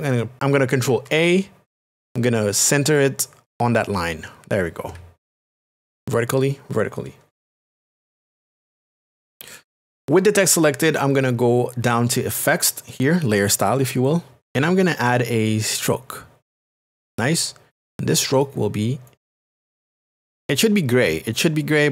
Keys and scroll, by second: 0.9 ctrl+a, 2.4 a, 5.5 ctrl+d.